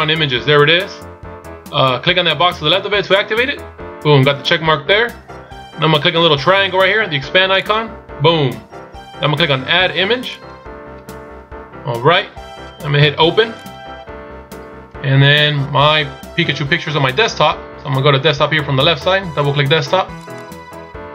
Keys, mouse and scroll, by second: 0.9 scroll up 3, 3.3 click, 7.7 click, 10.4 click.